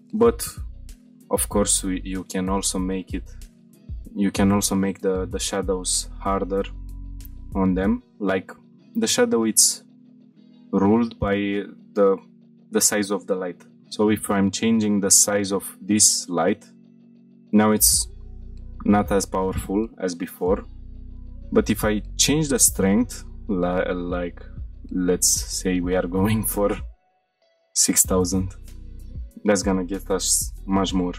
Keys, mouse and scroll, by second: 0.2-0.5 shift+middle drag, 0.7 shift+middle click, 1.3 middle click, 2.0 shift+middle click, 3.0 click, 3.6 middle click, 4.2-4.7 shift+middle drag, 5.7 middle click, 6.2-6.6 shift+middle drag, 6.8-7.5 middle drag, 7.6-8.5 shift+middle drag, 9.0 middle drag, 9.3-9.7 middle drag, 9.9 shift+middle drag, 10.5-11.2 drag, 13.8 s, 15.8 click, 16.3-18.0 shift+middle drag, 20.5 click, 21.8-26.6 drag, 28.9 middle click, 28.9-29.5 scroll up 2.